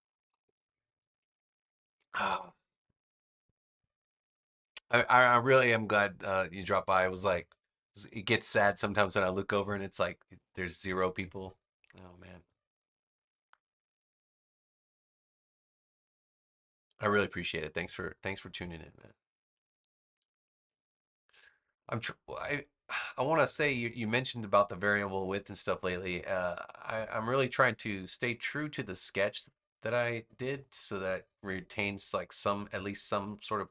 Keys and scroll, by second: 20.6 BackSpace.